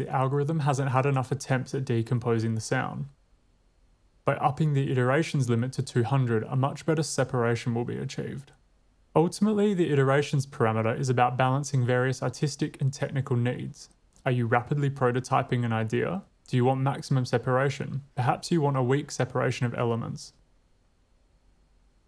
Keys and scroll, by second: 0.2 Tab, 0.6-1.6 typing.